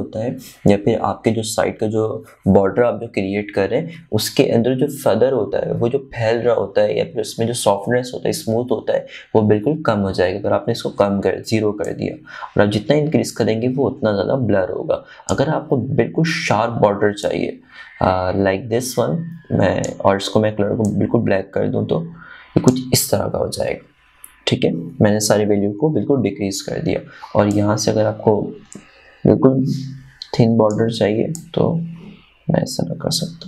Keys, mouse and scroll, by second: 13.3-18.7 drag, 18.7-26.6 drag, 29.0-33.4 drag.